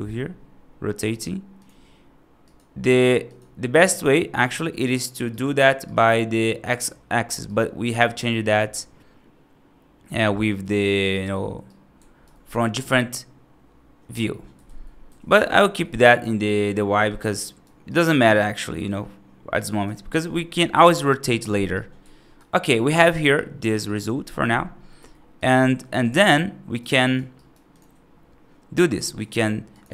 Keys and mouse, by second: 2.3 click, 5.2-5.5 right drag, 5.8 right drag, 7.4 right click, 11.0 right click, 11.5 right click, 14.5 ctrl+z, 14.9 ctrl+z, 15.2 ctrl+z, 15.9 right drag, 16.9 click, 17.3 right drag, 17.7 right click, 18.0 right drag, 18.6 right drag, 19.4 right drag, 21.6-22.2 alt+right drag, 23.2-23.5 right drag, 23.7 right click, 24.8 F3, 25.3 click, 26.2 right click, 26.8 right click, 27.2 right click, 28.9 middle click.